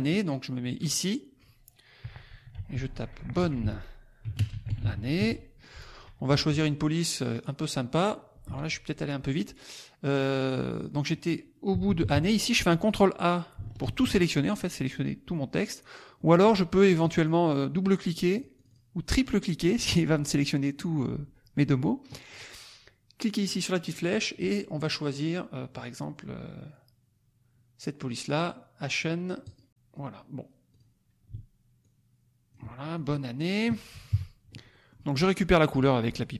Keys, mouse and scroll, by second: 0.8 click, 2.4-5.6 typing, 6.3 ctrl+a, 7.3 click, 8.4 Escape, 10.6-12.3 drag, 11.6 Right, 13.8 ctrl+a, 16.3 middle click, 16.3 scroll up 1, 16.9 click, 18.3 click, 23.3 click, 24.4-25.0 scroll up 2, 29.4 click, 30.7 click, 31.7 ctrl+click, 32.9 ctrl+click, 34.1 KP_Subtract, 34.6 click, 35.0-36.3 middle drag.